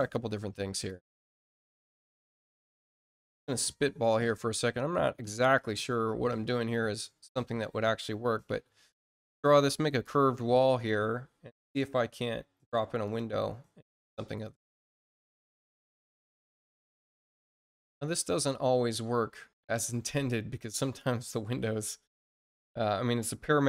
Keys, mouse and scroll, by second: 0.8 click, 1.8-2.3 scroll up 4, 3.2 click, 4.0 click, 4.9 scroll up 2, 5.5 click, 6.5 click, 8.4-10.0 alt+drag, 13.0 click, 14.2 click, 16.5 click, 17.1 click.